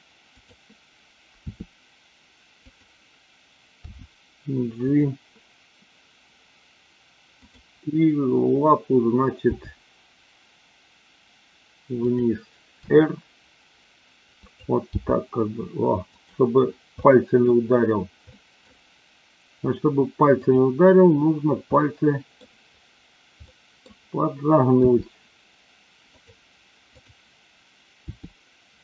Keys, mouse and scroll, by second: 0.3 click, 1.4 r, 2.6 click, 3.9 g, 4.7 click, 9.5 g, 12.0 click, 12.9 r, 14.5 click, 14.9 g, 17.0 scroll up 1, 17.1-17.5 middle drag, 18.2 scroll up 1, 18.4 middle click, 21.8-22.4 middle drag, 23.4 middle click, 24.8 r, 27.0-27.5 drag, 28.1 r.